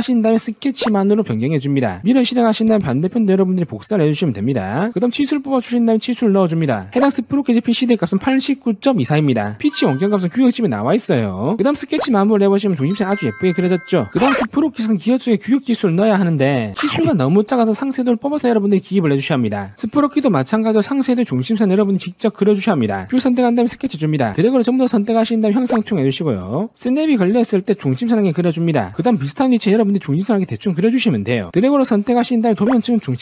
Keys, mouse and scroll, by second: 0.7 click, 2.0 click, 2.5 click, 2.9 click, 3.3 click, 3.6 scroll down 2, 3.7 middle click, 4.2 click, 4.9 middle click, 5.2 d, 5.5 click, 6.6 click, 12.0 right click, 13.2 click, 14.3 click, 14.8 click, 15.1 shift+f, 15.2 click, 15.5 click, 15.9-16.3 scroll up 2, 16.3 middle click, 16.7 click, 17.5 click, 17.7 scroll down 2, 17.8 middle click, 18.3 click, 18.5 middle click, 18.8-19.1 scroll down 1, 19.1 click, 19.7 click, 19.7 click, 23.9 click, 24.7 click, 25.8 click, 26.6 click, 27.5 click, 29.0 click, 29.3 click, 31.5 click, 31.7 click, 32.0 click, 32.8 click.